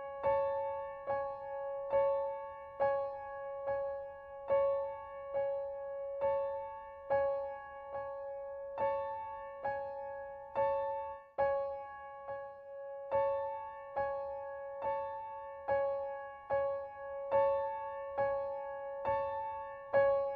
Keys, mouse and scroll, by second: 0.2 click, 4.6-6.3 drag, 9.3 ctrl+l, 18.3 click.